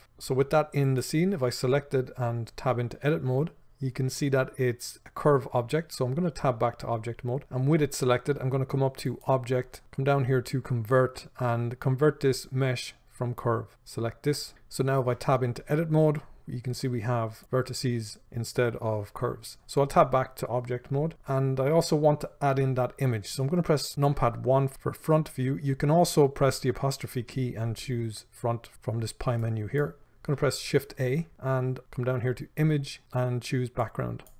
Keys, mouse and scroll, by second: 0.0-1.2 drag, 2.9 Tab, 14.5-15.5 drag, 17.4 click, 19.6 Tab, 24.4 KP_1, 31.3 shift+a.